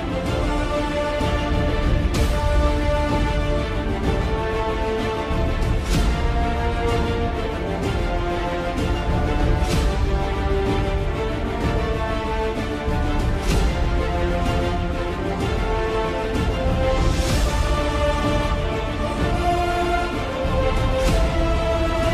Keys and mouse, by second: 0.2 ctrl+alt+click, 1.3 click, 2.4 middle click, 5.3 middle click, 8.7 shift+click, 9.5 shift+click, 10.6 KP_7, 12.3 i, 15.6 s, 18.9 KP_3, 21.8 alt+e.